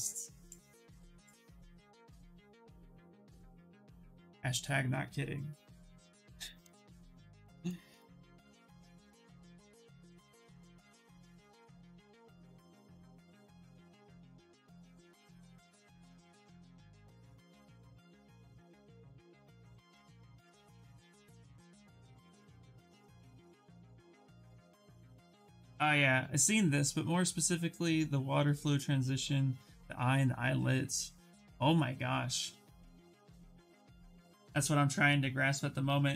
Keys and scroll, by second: 16.5 s, 20.0 ctrl+z, 20.3 ctrl+z, 20.6 ctrl+z, 20.9 ctrl+z, 21.6 ctrl+z.